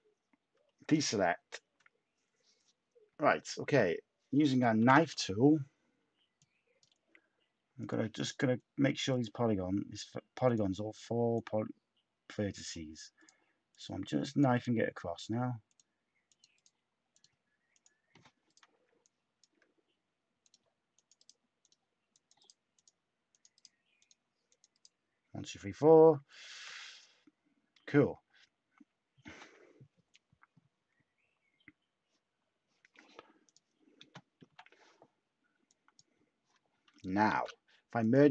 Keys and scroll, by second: 0.5 /, 4.7 ctrl+k, 34.4 /, 37.2 z.